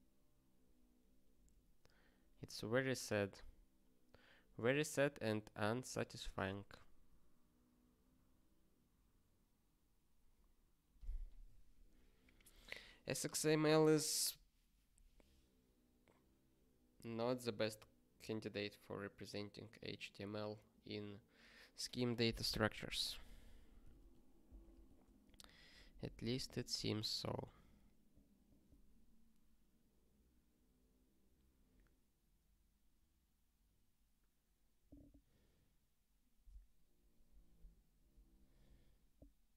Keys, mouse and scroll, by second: 22.8 ctrl+p, 23.1 ctrl+a, 23.5 ctrl+j, 23.9 ctrl+s.